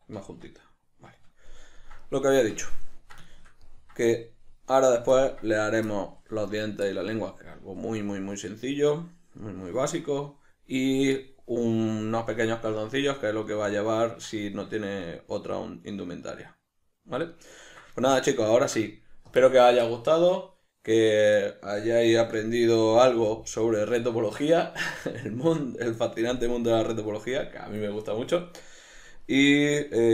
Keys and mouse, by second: 0.3 Tab, 22.2 Tab.